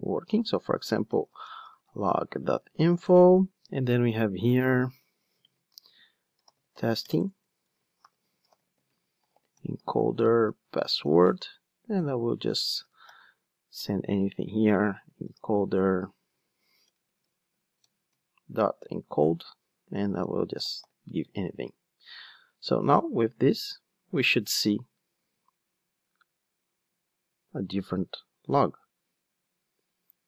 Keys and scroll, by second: 15.8 Return, 16.3 super+z, 17.8 Return, 22.9 ctrl+d.